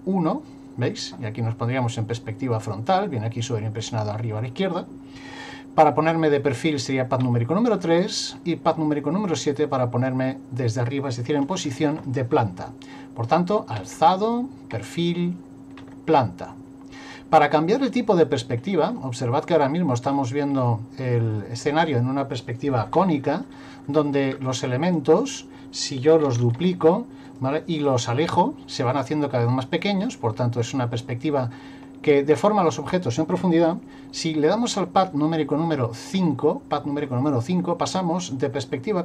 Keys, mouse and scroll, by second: 7.2 KP_3, 9.2 KP_7, 13.8 KP_1, 14.7 KP_3, 15.8 KP_7, 18.9 middle click, 20.4-22.1 scroll up 2, 23.0 shift+middle click, 24.9 right click, 26.4 shift+d, 27.9 click, 36.1 KP_5, 38.4-39.0 scroll down 2.